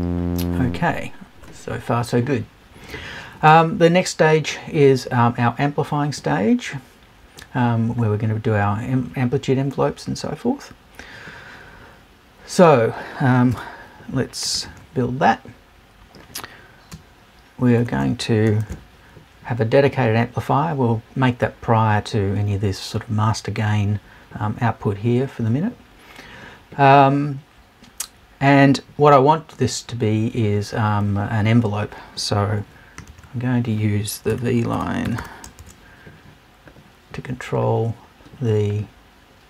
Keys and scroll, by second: 13.5 BackSpace, 14.5 super+BackSpace.